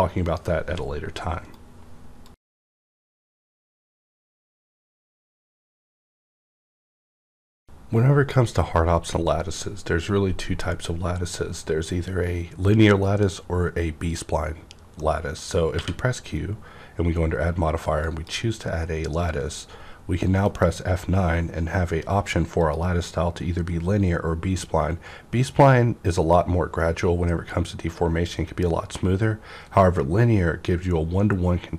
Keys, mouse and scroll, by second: 1.5 right click, 15.7-18.0 middle drag, 15.7 q, 18.0 click, 20.4 F9, 22.6 click.